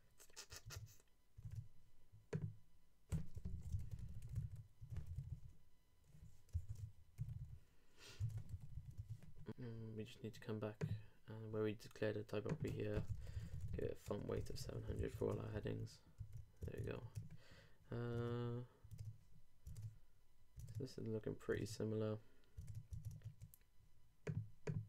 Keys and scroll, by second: 0.6 super+Tab, 6.7 super+a, 7.2 super+4, 8.2 super+0, 8.4 super+a, 8.5 super+7, 9.4 shift+super+Tab, 15.0 super+;, 15.2 super+Tab, 15.6 super+r, 16.6 super+Tab, 18.1 super+Tab.